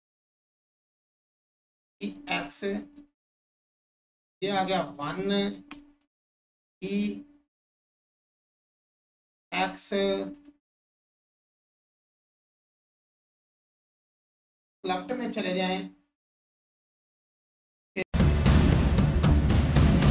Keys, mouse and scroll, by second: 0.9 click, 4.5 1, 4.9-5.3 scroll up 1, 10.3 click, 10.6-11.0 scroll up 1, 11.3-14.4 alt+drag, 18.3 click, 19.2 2, 19.3 Return, 19.4 alt+click, 19.5 scroll down 1, 19.5 alt+click, 19.8 click.